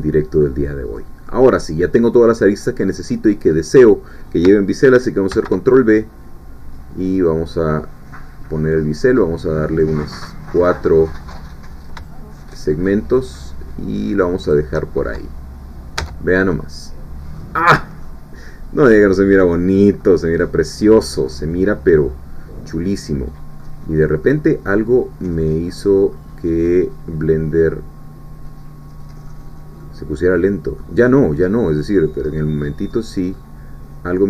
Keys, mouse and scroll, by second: 0.9 middle click, 1.9-2.3 scroll down 1, 2.3 middle click, 3.1 scroll up 1, 3.4-5.8 middle drag, 5.3 ctrl+b, 8.3-9.2 scroll up 1, 14.4 shift+click, 16.0 Tab, 16.5-17.7 middle drag, 17.7 scroll down 2, 18.0-19.2 middle drag, 19.7-20.3 scroll up 1, 20.3 scroll down 1, 21.1 scroll down 1, 21.3-23.8 middle drag, 24.2-25.6 middle drag, 25.7 scroll up 1, 26.1-26.7 scroll down 2, 26.7-29.5 middle drag, 29.8-31.0 middle drag, 31.0-31.3 scroll up 2, 31.5 scroll down 2, 32.0-32.9 scroll up 4, 32.9 scroll down 2, 33.4-34.2 middle drag.